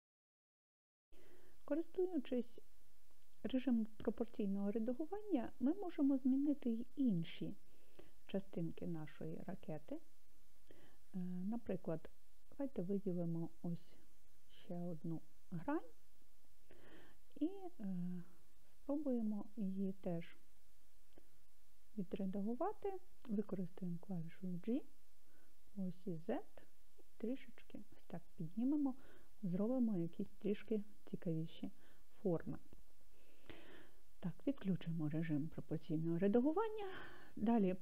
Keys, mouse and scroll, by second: 7.6 scroll down 1, 7.8-11.4 middle drag, 11.9-14.7 scroll up 3, 14.7 click, 17.4-20.6 middle drag, 24.7 g, 26.2 z, 28.0 click, 34.6 click, 37.1-37.6 scroll down 3.